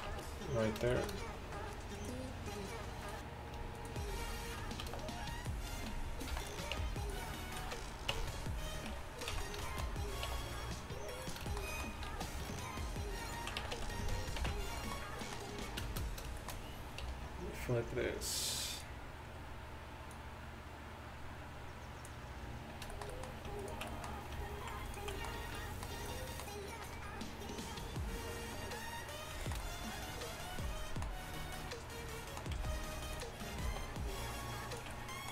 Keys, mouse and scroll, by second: 0.1 Tab, 4.9 shift+d, 6.4 p, 6.8 Tab, 7.7 z, 8.2 Tab, 8.9 a, 9.4 z, 10.3 e, 12.2 alt+s, 13.6 a, 13.9 a, 14.4 ctrl+n, 17.1 t, 32.6 g, 33.7 alt+s.